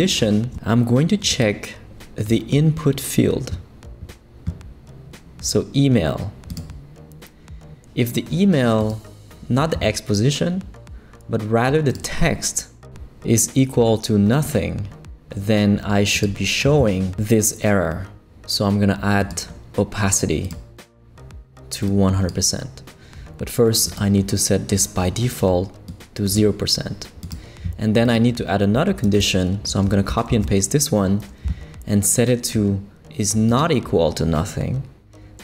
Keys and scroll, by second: 29.0 super+c, 30.3 super+v.